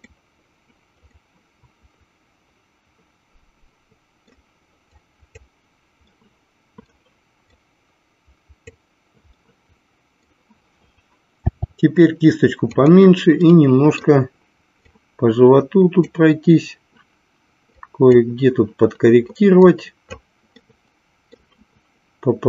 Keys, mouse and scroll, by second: 1.1-4.3 middle drag, 5.2 click, 6.2 middle click, 7.8 click, 9.5 middle click, 11.3 f, 13.6 middle click, 15.2-16.5 drag, 18.0 click, 19.7 click, 20.7 middle click.